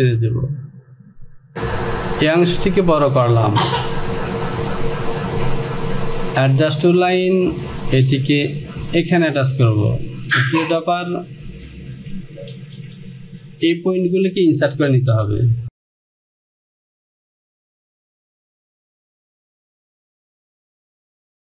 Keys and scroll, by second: 16.0 Home.